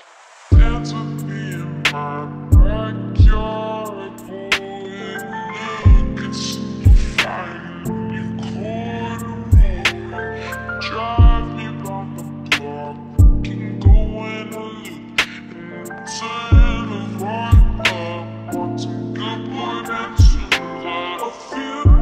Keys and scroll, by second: 0.4-2.1 typing, 2.7 Return, 12.0-13.0 typing, 16.8 p.